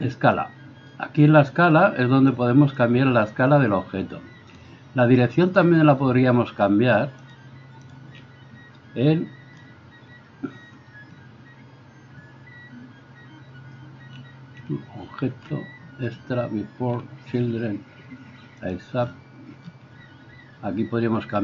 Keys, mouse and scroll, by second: 0.4-21.4 drag.